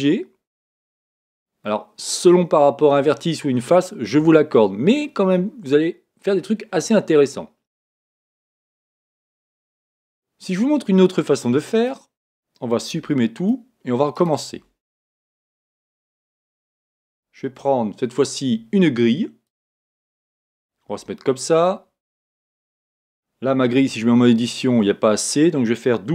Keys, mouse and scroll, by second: 1.6-3.6 middle drag, 5.0-9.0 middle drag, 11.7-13.7 right drag, 13.0 x, 14.2-16.0 right drag, 14.6 x, 15.4-18.2 middle drag, 17.4 shift+a, 20.9 s, 22.5 click, 23.8 Tab.